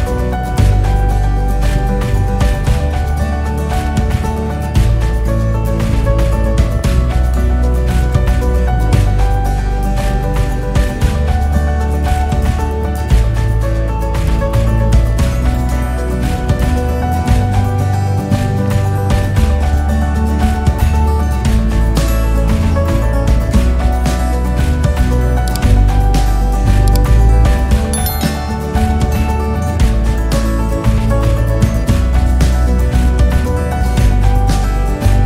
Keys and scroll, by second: 9.3 Return, 10.8 Return, 23.6 Return, 28.6 ctrl+s.